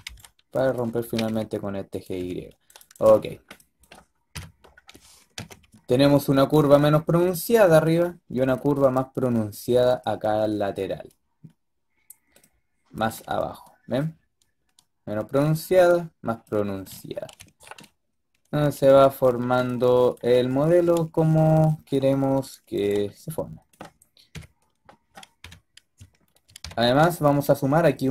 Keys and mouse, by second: 0.0-0.9 typing, 2.1 a, 3.2-4.2 drag, 4.2 KP_5, 5.2 z, 12.3-17.0 middle drag, 22.8-23.6 drag, 24.2 KP_4, 25.3 KP_7, 26.5 KP_5.